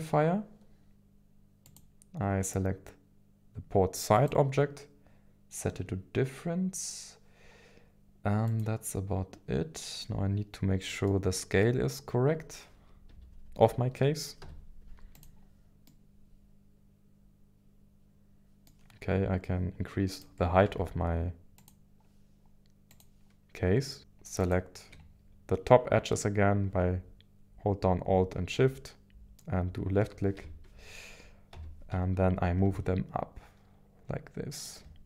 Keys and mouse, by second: 0.0-4.3 drag, 8.5 click, 10.0-11.2 middle drag, 12.7 KP_1, 13.1 KP_3, 14.4 z, 15.8-18.7 middle drag, 20.1 click, 20.6 Tab, 22.9 click, 24.0 alt+shift+KP_1, 28.5 middle click, 30.3 KP_1, 31.5 g, 31.9 z, 34.6 ctrl+click.